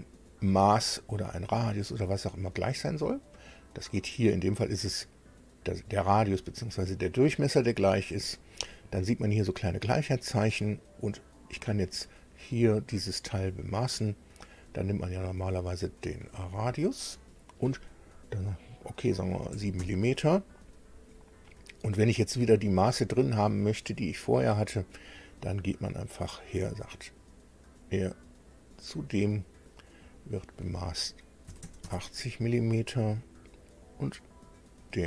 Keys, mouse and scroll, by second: 8.0 click, 11.7 click, 14.6 click, 16.3 click, 19.5 KP_7, 19.8 KP_Enter, 26.6 click, 28.5 click, 29.9 click, 31.5 KP_8, 31.6 KP_0, 31.8 KP_Enter, 34.7 click.